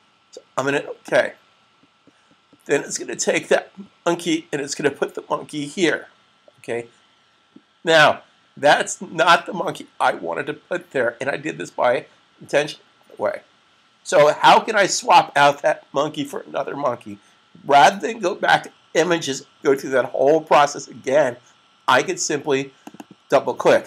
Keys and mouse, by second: 0.9 click, 22.7 click, 23.5 double click.